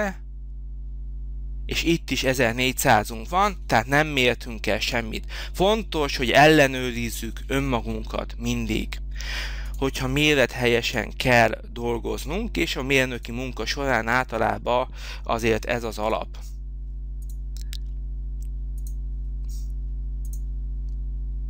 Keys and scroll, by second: 4.8 Escape.